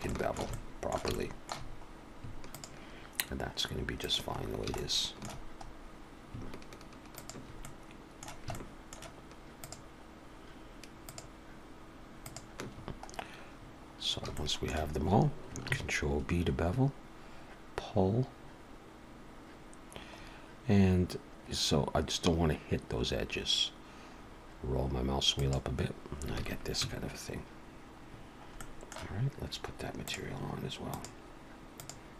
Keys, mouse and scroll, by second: 0.1 shift+middle click, 0.5 middle click, 1.1 shift+middle click, 1.7 scroll up 1, 2.5 shift+click, 4.0 shift+click, 4.4 scroll down 3, 4.8 shift+middle click, 5.7-6.3 scroll up 1, 6.3-7.0 scroll up 1, 7.2 shift+click, 7.6 middle click, 8.5 shift+middle click, 9.5 shift+click, 11.1 shift+click, 12.2 shift+click, 13.1-13.7 scroll down 2, 14.3 shift+middle click, 15.7 ctrl+b, 26.4 alt+a, 26.8 Tab, 28.1-28.6 scroll down 4, 28.6 middle click, 30.1 click, 30.9 click.